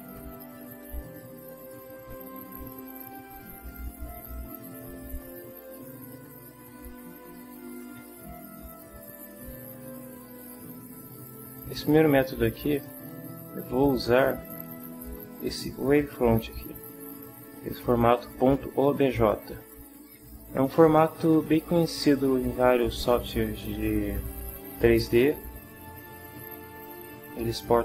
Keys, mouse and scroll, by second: 1.0 ctrl+middle click, 1.9 ctrl+middle click, 2.8-3.4 ctrl+scroll down 1, 5.0-6.0 drag, 6.9 ctrl+click, 7.9 ctrl+Tab, 8.5 middle click, 10.4 click, 12.7 click, 26.8 click.